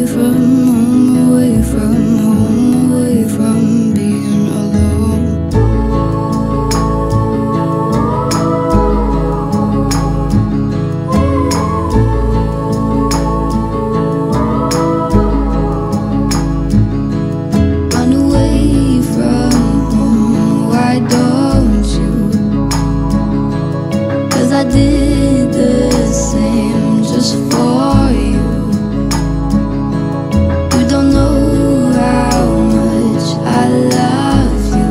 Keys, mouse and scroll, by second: 0.2-1.7 scroll down 1, 1.7-4.5 drag, 4.5-5.0 scroll up 1, 5.0-5.7 middle drag, 6.6-9.7 drag, 9.8-10.5 middle drag, 11.6 click, 12.4-12.8 scroll up 1, 12.8-13.5 middle click, 13.6-14.0 scroll up 1, 14.0-15.0 middle click, 15.2-16.1 drag, 19.8-20.2 scroll down 1, 20.2-21.8 middle drag, 23.1 click, 24.4-25.5 scroll down 1, 25.5-26.1 middle click, 26.6-33.8 drag.